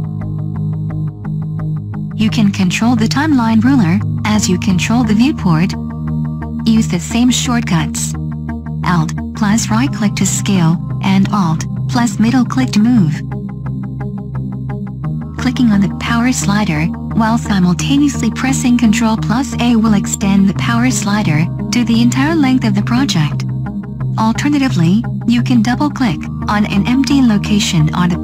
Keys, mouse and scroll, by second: 7.2 right click, 10.0 alt+middle click, 17.3 ctrl+a.